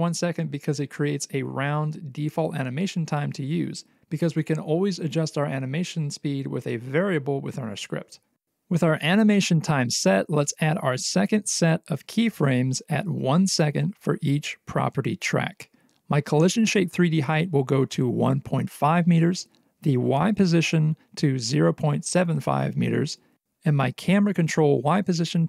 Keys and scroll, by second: 14.1 alt+x, 20.0 Return, 24.2 Return.